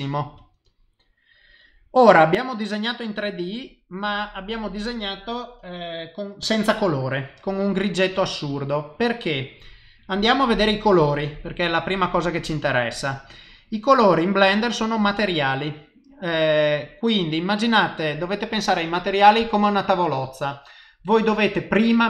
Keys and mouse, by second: 1.0 middle click, 17.7 click.